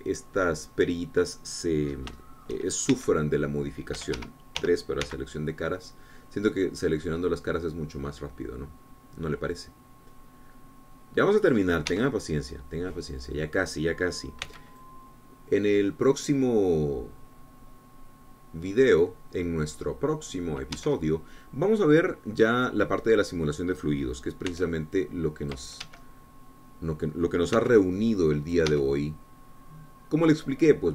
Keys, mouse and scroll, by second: 2.1-3.2 drag, 3.2 middle click, 3.6 shift+click, 4.3 shift+c, 5.3 Escape, 6.0 3, 6.4 c, 6.7-13.1 drag, 13.3 Escape, 13.4-15.8 middle drag, 15.8 c, 16.2-21.9 drag, 22.2 Escape, 22.4-25.9 drag, 25.9 c, 26.3 click, 27.2 Escape, 27.4-28.7 drag, 29.0 c, 29.2 click, 30.1 Escape, 30.3-30.9 drag.